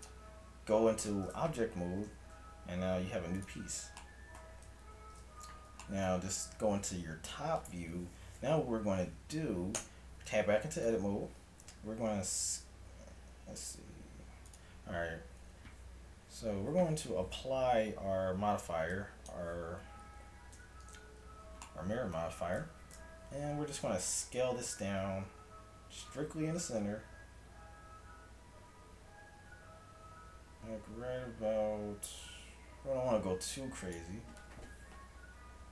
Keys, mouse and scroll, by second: 2.0 g, 4.1 middle click, 4.9 KP_7, 9.8 Tab, 10.9 a, 12.2 s, 17.1 Tab, 19.0-20.8 drag, 20.6 Tab, 23.0 KP_7, 24.6 s.